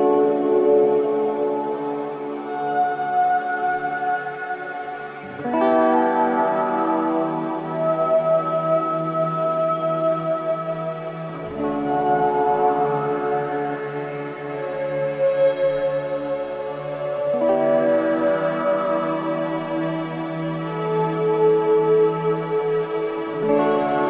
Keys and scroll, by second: 3.1 ctrl+g, 3.7 c, 4.2 Escape, 10.3 F3, 10.6 Escape, 15.4-16.2 typing, 16.9 Escape, 21.7 ctrl+g, 23.3 c, 23.6 Escape.